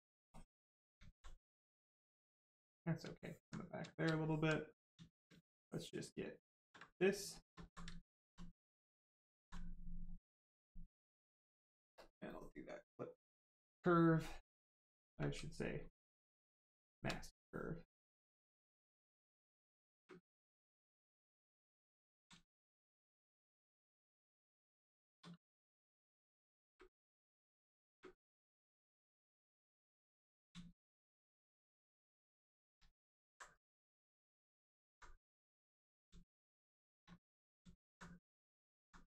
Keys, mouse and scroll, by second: 1.0 alt+right click, 1.5 right click, 1.6 right click, 3.1 alt+right click, 3.6 right click, 3.7 right click, 3.7 shift+right click, 4.5 right click, 4.9 shift+right click, 6.7 shift+right click, 6.7 right click, 7.3 shift+right click, 7.5 alt+right click, 9.5 ctrl+right click, 11.9 ctrl+click, 14.3 ctrl+click, 17.9 space, 21.1 ctrl+click, 22.2 shift+click, 24.6 space, 25.5 ctrl+click, 26.2 click, 29.5 ctrl+click, 37.7 alt+right click, 38.9 right click, 39.0 right click.